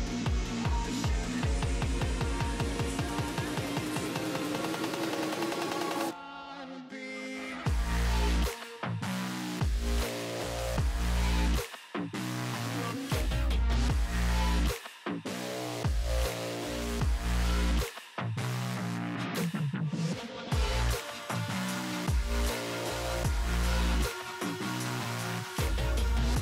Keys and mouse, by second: 7.3 click, 11.2 click, 13.1 click, 15.6 click, 23.0 click, 25.6 click.